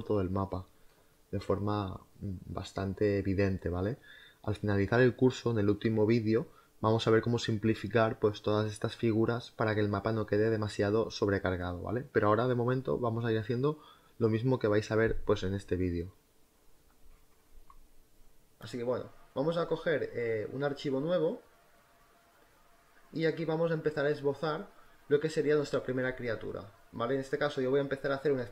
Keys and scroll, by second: 23.8 b.